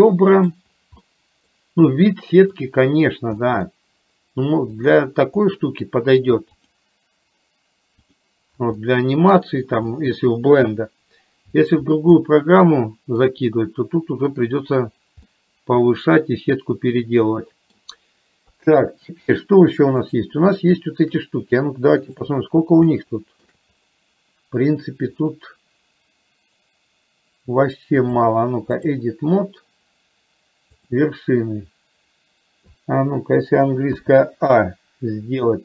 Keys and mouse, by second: 1.0 middle click, 3.4 middle click, 5.5 middle click, 8.9 middle click, 10.0 middle click, 12.4-13.4 middle drag, 15.3-17.9 middle drag, 18.5 KP_3, 20.0 click, 22.1 click, 23.0 shift+middle click, 28.1 click.